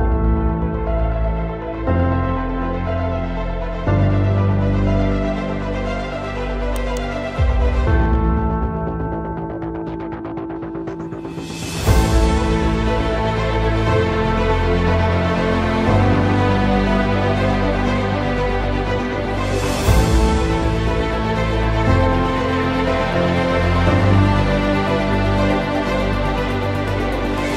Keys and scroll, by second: 7.0 space, 8.3 shift+F11, 10.3 2, 10.9 Return, 11.9 space, 12.4 F8, 13.3-15.6 typing, 17.8 ctrl+space, 18.5 alt+t, 18.7 u, 19.1 Return, 21.5 t, 22.5 Return, 24.8 c, 25.4 Escape.